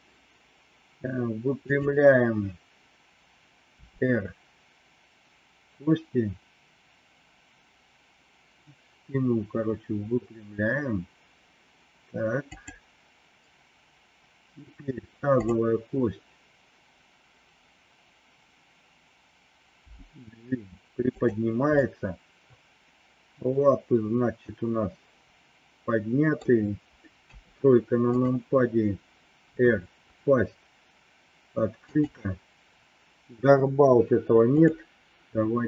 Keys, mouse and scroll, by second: 1.6 click, 3.7 r, 19.8 g, 21.8-26.4 middle drag, 27.2 KP_3, 29.5 r, 34.5 click.